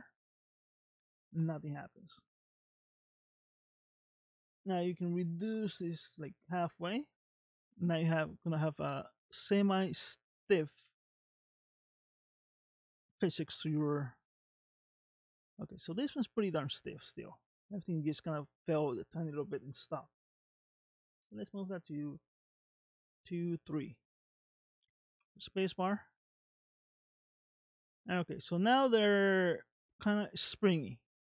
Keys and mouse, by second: 1.4 space, 3.5-6.6 drag, 13.6 space, 15.3 space, 16.0-17.3 middle drag, 20.3-22.4 drag, 25.2 space, 31.1 space.